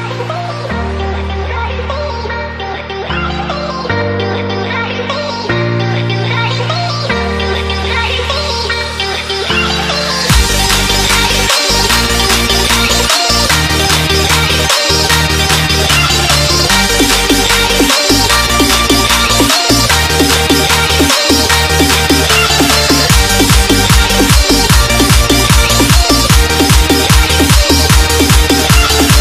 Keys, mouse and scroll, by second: 2.3 right click, 3.3 click, 9.7 alt+Num_Lock, 9.8 scroll up 1, 10.3 scroll down 1, 10.7 click, 11.9 KP_Add, 12.3-15.1 typing, 13.5 Return, 14.1 KP_Add, 15.7 click, 18.0 alt+Tab, 19.6 Tab, 19.8 click, 21.1 alt+Tab, 22.1 ctrl+v, 22.5-24.4 typing, 24.4 click, 24.7 Tab, 25.4 click, 25.7 c, 25.8 Tab, 26.3 v, 27.1 click.